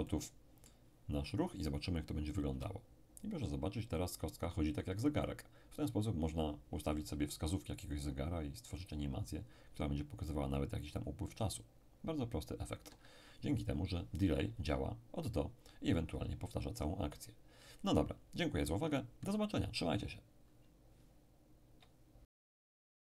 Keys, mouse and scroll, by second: 2.5 p, 12.9 Escape.